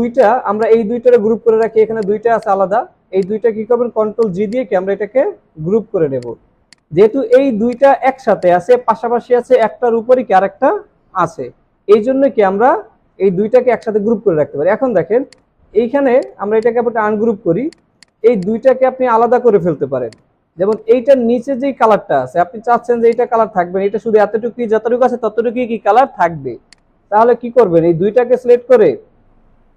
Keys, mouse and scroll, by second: 0.6 double click, 14.4-14.8 alt+scroll up 1, 16.6 right click, 19.7 ctrl+z, 22.8 ctrl+z.